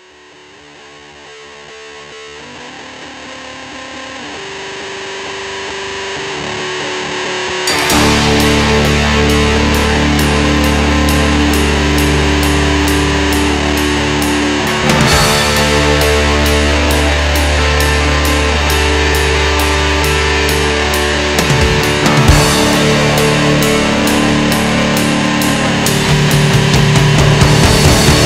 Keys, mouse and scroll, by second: 0.8 ctrl+shift+click, 3.4-4.9 drag, 5.7 ctrl+shift+click, 6.8-7.4 drag, 7.4-8.8 middle drag, 8.8 click, 9.5 ctrl+shift+click, 10.6-11.6 drag, 12.3 ctrl+shift+click, 13.3-14.0 drag, 14.0-15.3 middle drag, 15.3 click, 16.4 ctrl+shift+click, 17.4-18.9 drag, 19.8 ctrl+shift+click, 21.1-22.7 drag, 23.9 ctrl+shift+click, 25.1-26.5 drag, 27.5 ctrl+shift+click.